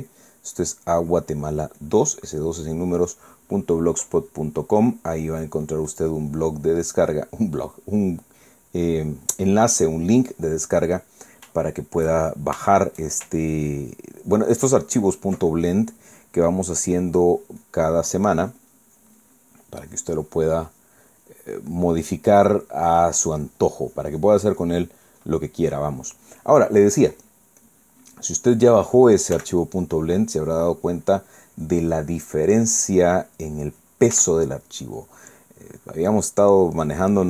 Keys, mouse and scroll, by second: 0.5-3.9 ctrl+drag, 4.1 ctrl+click, 4.7 ctrl+click, 5.2 ctrl+click, 5.7 ctrl+click, 6.0 ctrl+click, 6.4-8.4 ctrl+drag, 8.9-11.8 drag, 11.8 middle click, 12.6-13.6 shift+middle drag, 13.7 shift+middle click, 14.7 ctrl+click, 15.7 ctrl+click, 16.5 ctrl+middle click, 17.6 click, 18.8-22.8 drag, 23.3 middle click, 24.4 click, 26.5 middle click, 27.8 click, 28.6 click, 29.5 middle click, 30.3 f, 30.6 click, 30.9-33.7 drag, 33.9 middle click, 35.1 f, 35.6 click, 36.0-37.2 drag.